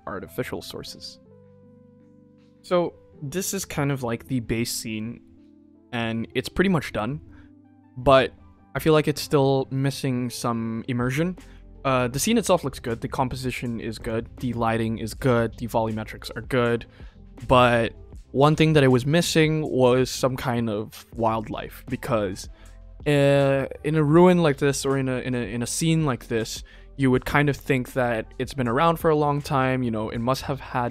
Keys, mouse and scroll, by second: 2.0 click, 13.9 click.